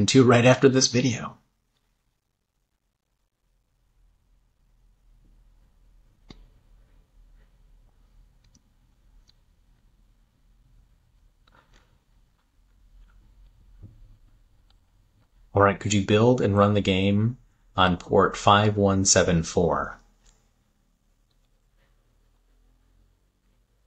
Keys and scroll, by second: 20.7 super+v.